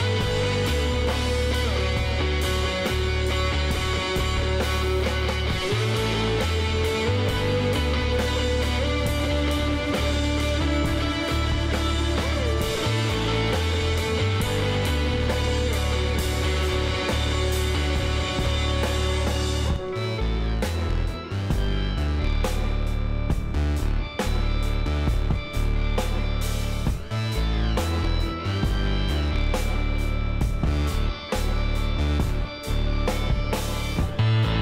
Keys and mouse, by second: 0.0-2.1 middle drag, 1.0 z, 1.8 Tab, 4.5 Tab, 5.3-11.3 middle drag, 11.3-14.3 drag, 13.9 ctrl+z, 14.8-17.9 drag, 17.1 x, 18.6-20.5 drag, 20.4 g, 22.5 Tab, 22.7-23.8 middle drag, 23.8 a, 24.9 middle click, 26.6-28.4 drag, 27.7 a, 28.5-34.6 middle drag.